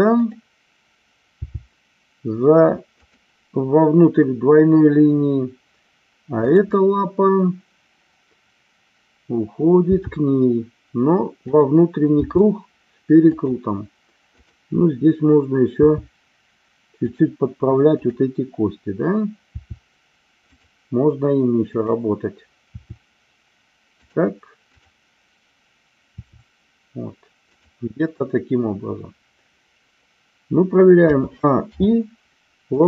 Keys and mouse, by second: 1.4 g, 3.0 click, 6.5 click, 9.9 g, 11.4 click, 12.1 r, 13.2 click, 15.8 r, 18.0-19.1 drag, 19.5 r, 21.6-22.8 drag, 24.0 click, 24.8 click, 26.1 r, 31.1 a, 31.8 i.